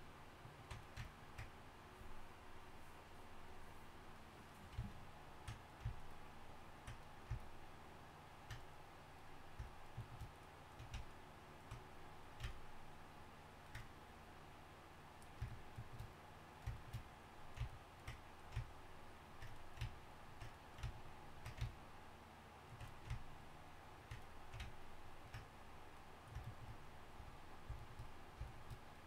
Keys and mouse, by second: 3.5-6.0 drag, 9.2-14.7 middle drag, 14.7 click, 14.7 right click, 15.6-16.8 middle drag, 16.8-18.7 middle drag, 18.7-26.1 drag, 18.7-27.3 right drag, 27.3-29.0 middle drag.